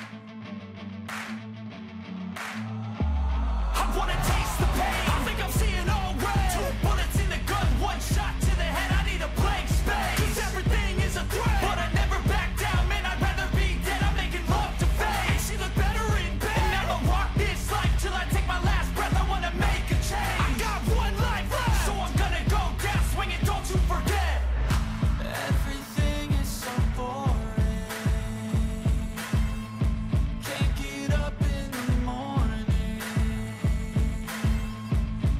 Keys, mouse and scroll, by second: 4.2 ctrl+z, 9.9 ctrl+z, 15.0-17.2 scroll down 2, 17.2-17.7 scroll up 2, 21.8 shift+click, 23.0 ctrl+g, 24.1 ctrl+a, 26.6 ctrl+d.